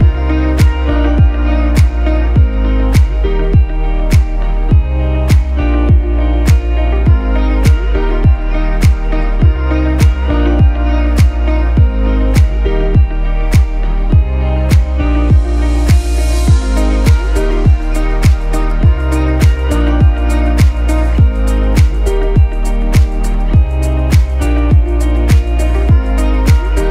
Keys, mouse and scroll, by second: 0.3 shift+Left, 1.7 click, 2.1-2.5 scroll down 1, 2.5-4.5 typing, 2.8 click, 3.2 click, 3.5 click, 3.7 click, 4.0 click, 4.7 click, 6.5 right click, 8.0 click, 9.9 click, 12.4 shift+Up, 14.5 shift+Up, 17.5 click, 19.4 ctrl+c, 19.9 ctrl+b, 21.3 click, 24.9-26.9 alt+shift+drag.